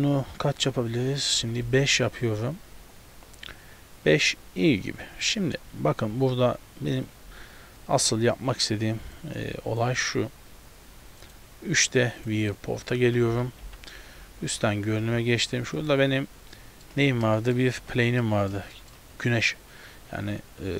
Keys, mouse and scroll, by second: 4.7 click, 5.7-6.6 scroll up 4, 9.2 click, 11.3 click, 12.7 scroll down 1, 13.3 scroll down 2, 13.3 KP_7, 13.7 KP_7, 14.3-15.3 scroll down 5, 15.2 z, 15.9 right click, 16.6 middle click, 17.0 z, 17.4 shift+middle click, 17.8 z, 18.3 middle click, 18.8 shift+middle click.